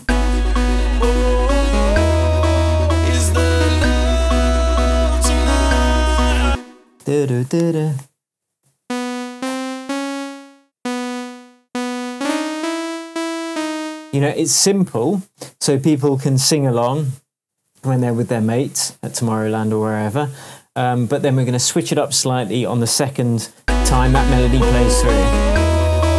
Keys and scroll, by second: 0.0 space, 1.0 p, 2.3 BackSpace, 6.4 space, 8.6 p, 15.3 alt+p, 18.0 super+d, 23.6 space.